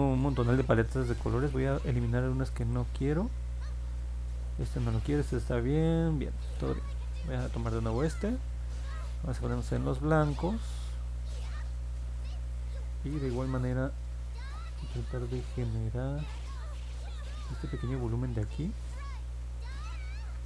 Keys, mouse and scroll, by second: 1.4 right click, 2.6 click, 6.4 click, 9.3-10.4 drag, 11.3 click, 12.1 click, 17.2 click, 18.1 ctrl+z, 19.4 click, 20.3 ctrl+z.